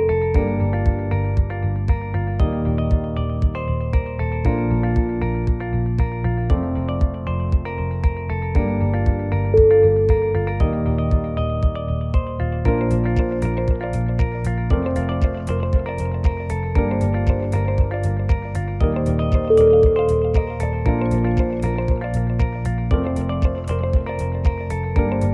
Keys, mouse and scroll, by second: 0.7 click, 1.0 g, 2.2 shift+middle click, 2.7 g, 3.9 g, 4.9 g, 6.0 click, 6.0 1, 6.6 g, 8.0 g, 9.8 g, 10.8 g, 11.8 ctrl+z, 11.8 click, 12.1 e, 13.4 g, 14.7 g, 16.3 click, 16.7 shift+click, 17.4 shift+click, 17.5 f, 17.8 click, 18.2 shift+click, 18.8 shift+click, 19.3 f, 19.6 scroll down 4, 19.9-20.5 scroll up 4, 20.1 f, 20.5 click, 20.9 g, 22.5-23.1 scroll down 10, 23.1 shift+z, 23.3-23.8 scroll up 6, 23.8 shift+middle click, 23.9 shift+middle click, 24.4 middle click, 25.1 click.